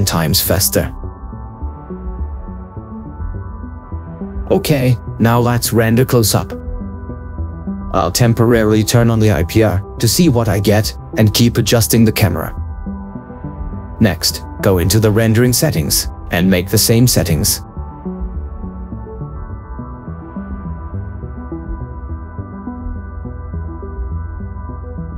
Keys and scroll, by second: 1.6 ctrl+4, 19.8 ctrl+4, 23.0 4, 23.6 Return.